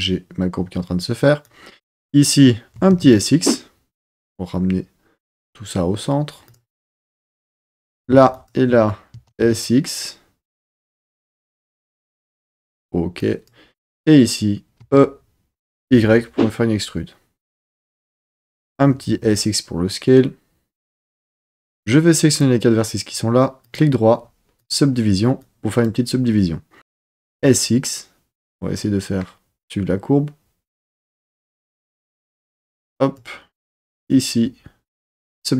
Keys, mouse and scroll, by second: 1.4 click, 2.8 s, 3.0 x, 6.5 click, 7.5 click, 8.3 shift+click, 9.2 s, 9.4 x, 12.5 click, 13.1 click, 14.8 e, 15.9 y, 17.9 click, 18.7 s, 19.1 x, 21.1 click, 21.8 click, 23.6-24.7 right drag, 25.4 click, 27.1 s, 27.4 x, 31.7 click, 32.4 click, 33.9-35.3 right drag.